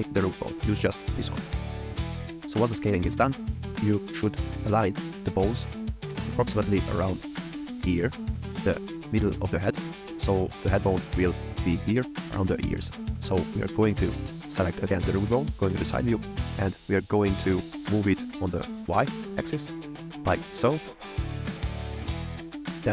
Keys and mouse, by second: 1.6 KP_3, 1.8 s, 2.0 click, 3.5 shift+middle click, 5.5 click, 6.2 shift+middle click, 7.2 click, 13.1 click, 14.6 click, 15.5 KP_3, 17.1 g, 17.7 y, 20.9 click, 21.1 ctrl+click, 21.9 click, 22.6-22.9 middle drag.